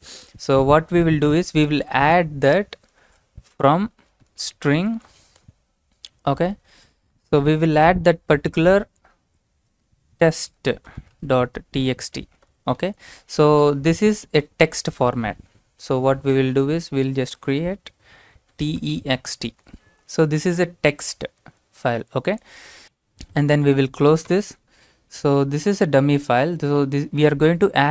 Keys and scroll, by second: 1.3-5.6 typing, 7.1-7.6 typing, 7.6 Left, 9.5-14.9 typing, 13.0 Right, 17.1-19.7 typing, 23.3 Right, 23.5 Right, 24.3 l.